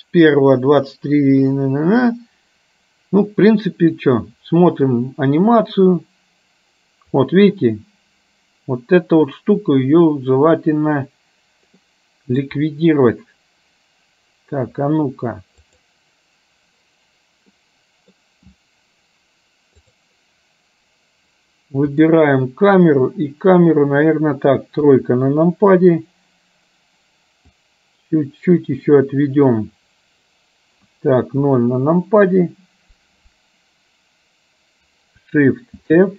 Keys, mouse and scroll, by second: 5.1-7.4 drag, 11.9 middle click, 13.4-14.6 middle drag, 15.7 click, 17.6 middle click, 19.9 click, 24.9 KP_3, 27.7-30.4 drag, 31.5 KP_0, 35.9 shift+f.